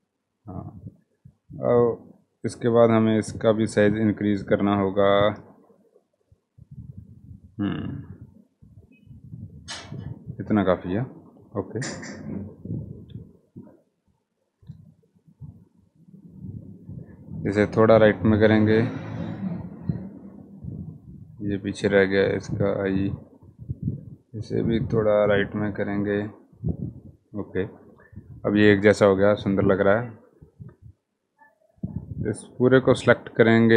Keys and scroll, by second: 14.4 Right, 14.6 Right, 14.7 Right, 14.9 Right, 15.4 Right, 15.6 Right, 15.8 Right, 15.9 Right, 16.0 Right, 16.1 Right, 23.4-24.1 Right, 24.3 Right, 24.5 Right, 24.7 Right.